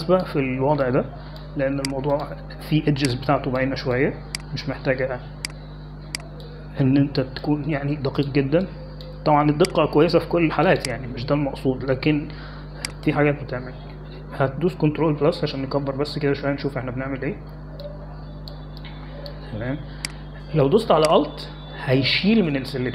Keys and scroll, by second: 17.0 ctrl+=, 18.2 ctrl+=, 19.6 space.